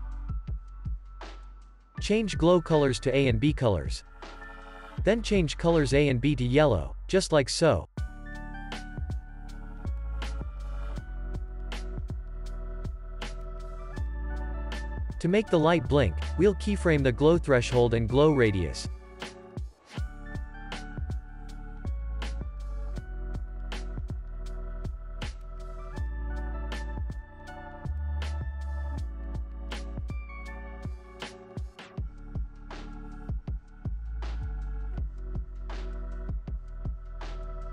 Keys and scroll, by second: 1.3 space, 21.2 ctrl+s, 21.9 u, 23.4 alt+z, 28.2 1, 28.5 0, 28.8 Return, 30.6 x, 31.3 z, 31.9 x, 36.2-37.1 typing.